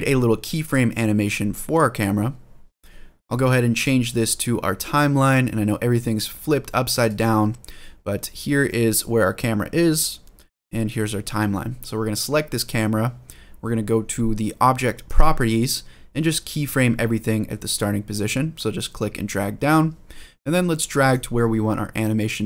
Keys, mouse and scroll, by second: 0.4 click, 3.5-6.9 drag, 7.7-8.4 scroll down 1, 8.4-10.3 middle drag, 12.4 click, 14.8 click, 18.5-19.5 drag, 20.8-22.4 drag.